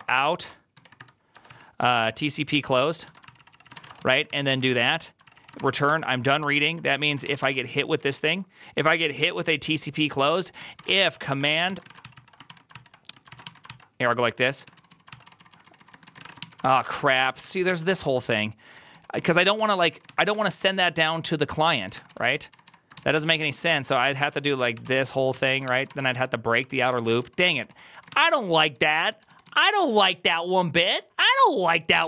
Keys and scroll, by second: 0.0-8.2 typing, 2.9 ctrl+y, 3.1 ctrl+c, 3.2 ctrl+c, 6.3 ctrl+d, 6.7 ctrl+c, 9.5-29.8 typing, 12.6 ctrl+c, 13.1 ctrl+c, 17.3 ctrl+c, 21.4 ctrl+c.